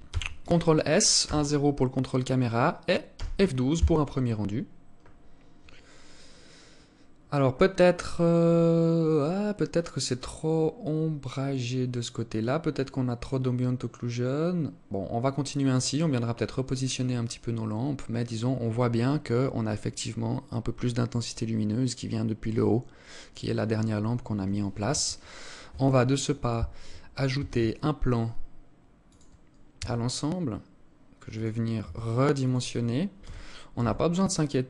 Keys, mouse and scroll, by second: 0.7 KP_0, 24.3 Escape, 26.8 shift+a, 29.2 s, 31.3 s, 32.7 g.